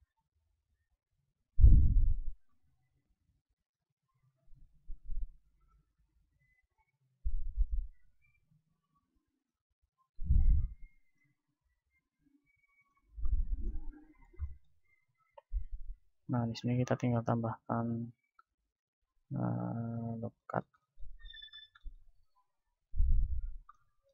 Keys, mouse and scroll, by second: 4.2 KP_7, 4.8 middle click, 5.2-8.9 drag, 8.6 ctrl+Tab, 10.2-11.8 right drag, 10.7-12.7 drag, 11.8 s, 13.0-16.0 drag, 16.0 ctrl+r, 16.0 middle click, 19.8-21.5 drag, 21.5-24.1 middle drag.